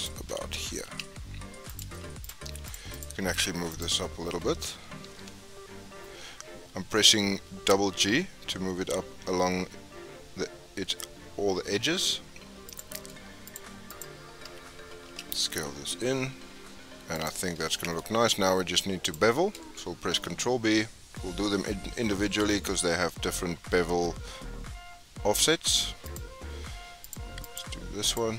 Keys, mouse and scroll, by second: 0.8 s, 2.2 alt+click, 3.3 alt+click, 3.7 alt+click, 5.0 g, 13.4 alt+click, 13.8 alt+click, 15.0 s, 19.0 alt+click, 20.1 ctrl+b, 27.0 alt+click, 27.4 alt+click, 28.0 alt+click.